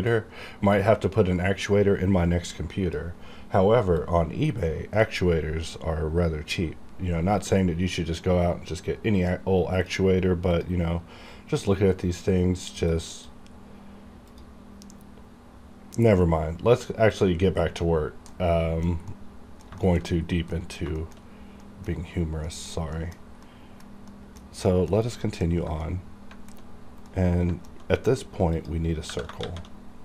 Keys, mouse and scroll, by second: 4.0 click, 4.0-6.2 drag, 6.2-8.2 scroll down 1, 8.2-10.5 drag, 10.5 click, 12.9 click, 13.6 scroll down 1, 14.3 click, 17.2 click, 18.3 middle click, 19.1 middle click, 19.8 shift+middle click, 19.8 shift+middle click, 20.5 scroll down 1, 20.5 middle click, 21.6 middle click, 22.2 scroll down 1, 22.5 middle click, 24.9 scroll down 1, 25.2 middle click, 25.5 scroll up 1, 25.8 middle click, 27.1-28.5 middle drag, 28.5 click, 29.4 shift+a.